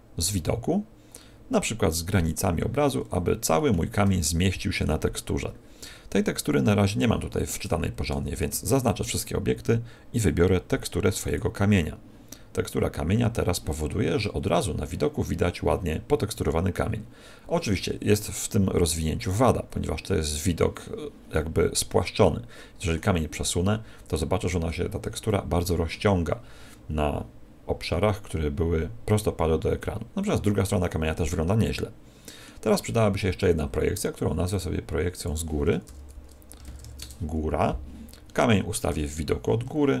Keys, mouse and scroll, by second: 3.1-4.1 scroll down 4, 4.1 shift+middle click, 4.1-5.1 scroll down 1, 7.6 Tab, 8.1 Tab, 8.3 a, 10.1 click, 23.3 middle click, 25.2 middle click, 29.7 middle click, 34.5 click, 38.8 KP_7, 39.9-40.0 scroll down 2.